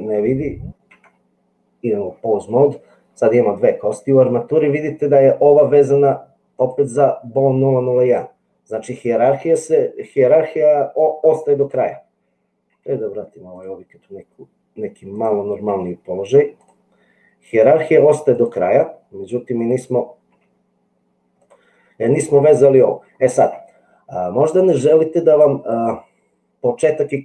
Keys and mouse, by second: 1.3 Tab, 6.5 click, 12.7 g, 15.1 click, 15.8 g, 19.6 click, 20.2 g.